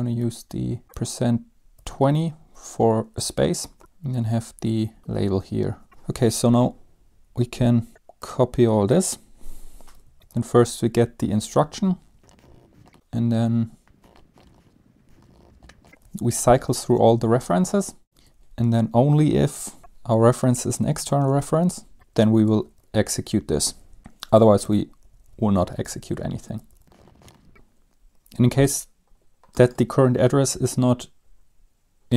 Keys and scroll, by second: 0.6-2.5 typing, 3.6-5.5 typing, 5.9 Up, 5.9 Return, 10.2 typing, 10.4 End, 10.6 Left, 11.2-20.3 typing, 12.4 Return, 12.4 Down, 12.6 Up, 16.3 Down, 21.7-25.3 typing, 22.7 Home, 24.7 ctrl+s, 25.1 Up, 25.3 Up, 25.4 Up, 25.7 Home, 25.9 Down, 26.7-28.0 typing.